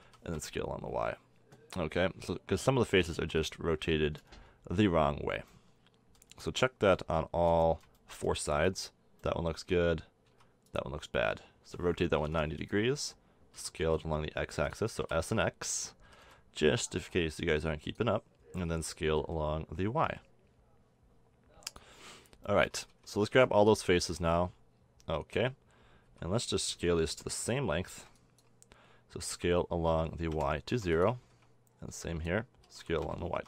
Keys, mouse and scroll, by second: 0.0 s, 3.7-9.3 middle drag, 10.3 a, 11.6 r, 13.6 s, 15.0 s, 16.0 s, 18.6 s, 22.1-24.2 middle drag, 22.9 a, 23.3 b, 26.1 a, 26.7 b, 27.2 click, 27.9 b, 29.3 s, 31.3 a, 31.9 b, 32.6 s.